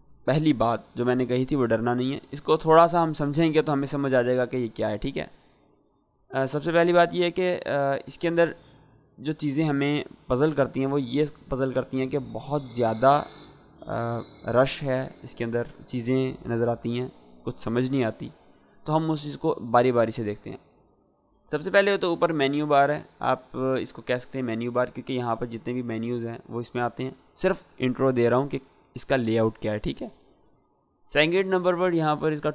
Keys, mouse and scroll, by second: 24.7 click.